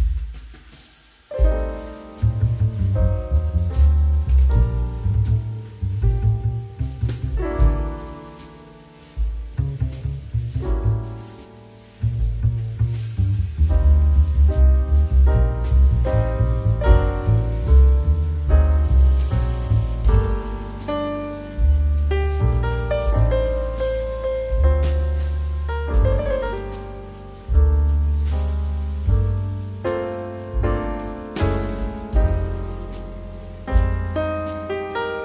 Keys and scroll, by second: 3.3 q, 8.9 space, 12.9 space, 17.6 space, 20.9 2, 27.5 2.